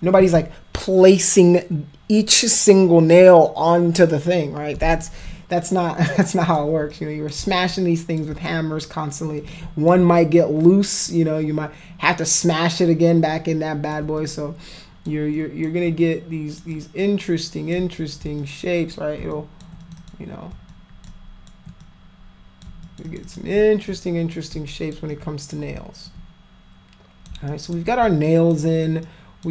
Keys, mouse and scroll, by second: 5.1 alt+click, 6.1 alt+click, 6.9 click, 7.7 click, 9.4 click, 11.1-13.9 alt+drag, 14.2 shift+click, 15.3 shift+click, 16.1 click, 16.8 click, 18.0 shift+click, 18.4 alt+click, 19.3 shift+click, 19.9 click, 20.0 click, 20.7 shift+click, 21.1 shift+click, 21.8 click, 22.8 shift+click, 23.1 shift+click, 23.3 shift+click, 23.9 alt+click, 24.7 alt+click, 25.1 alt+click, 26.1-27.3 alt+drag, 27.5 alt+click, 28.3 alt+click, 29.0 alt+click.